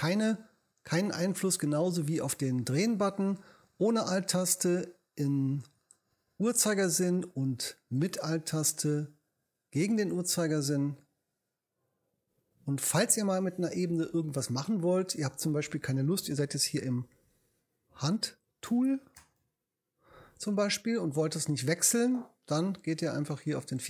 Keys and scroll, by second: 16.4 h, 18.0 h.